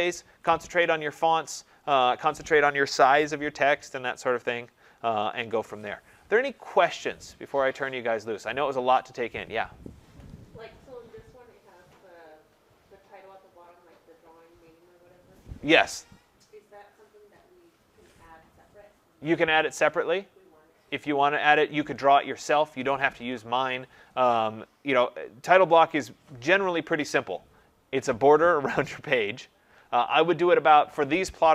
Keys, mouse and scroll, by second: 1.5-2.3 scroll, 2.3-3.2 scroll up 16, 3.2-4.4 scroll up 17, 4.4 scroll down 1, 4.4-8.8 scroll down 2, 8.8-9.5 scroll down 1, 16.1-19.5 scroll down 30, 19.5-22.7 scroll down 3.